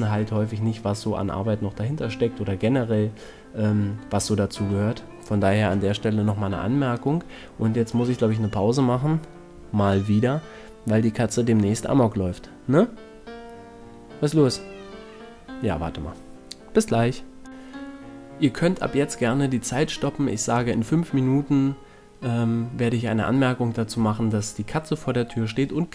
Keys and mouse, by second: 1.2 Tab, 2.8 KP_7, 4.8-6.4 drag, 7.4 KP_0, 8.4 shift+f, 11.8 shift+f, 15.6 shift+f, 17.2 shift+f, 18.4-19.7 middle drag, 20.5 shift+f, 21.5-23.5 middle drag, 22.3 shift+f.